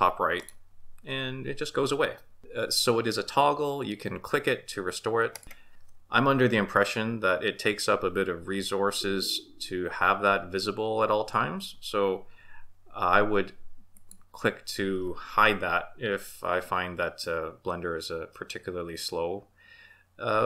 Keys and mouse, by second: 0.4 click, 5.3 click, 13.9 click.